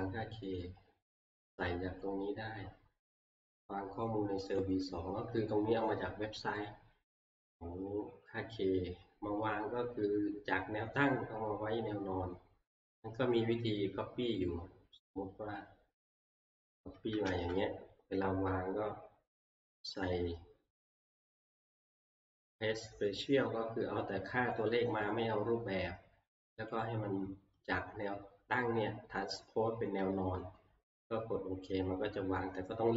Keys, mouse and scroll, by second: 0.6 click, 0.9 scroll, 2.1 scroll, 4.6 click, 6.5 middle click, 6.7 scroll, 8.3 scroll, 14.4 click, 14.7 scroll, 15.5 scroll, 16.7 shift+click, 17.3 ctrl+c, 19.7 right click, 21.9 click, 24.8 click, 26.8 click.